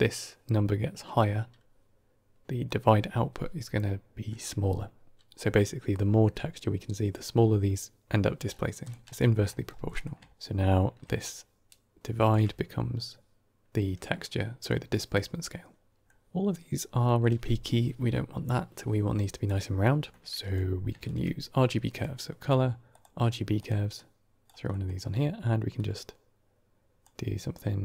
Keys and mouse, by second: 2.6-5.2 drag, 8.7 click, 9.1 g, 9.4 middle click, 10.0 middle click, 11.1-12.2 shift+drag, 14.6-15.0 drag, 17.0 middle click, 20.0 middle click, 20.2 click, 20.9 shift+a, 23.8 click, 24.6 middle click, 25.6-26.9 drag.